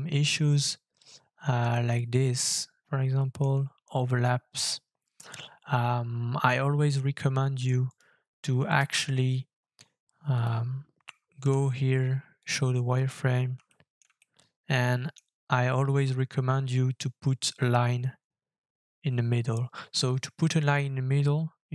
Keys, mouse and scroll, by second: 1.2-1.5 scroll up 3, 1.7 shift+middle click, 4.3-5.4 scroll down 10, 6.5 middle click, 7.9 right click, 8.8 middle click, 11.4 f, 12.9-13.5 scroll up 4, 13.7 shift+middle click, 14.2 middle click, 15.2 scroll up 1, 15.3 scroll down 3, 15.9-18.4 scroll down 5.